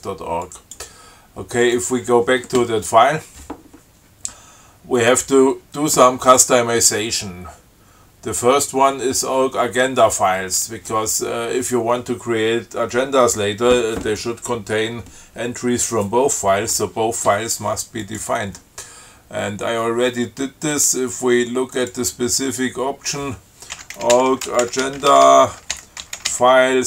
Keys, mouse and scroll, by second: 0.7 click, 1.9 click, 18.3 click, 22.0 click, 23.7-26.8 typing.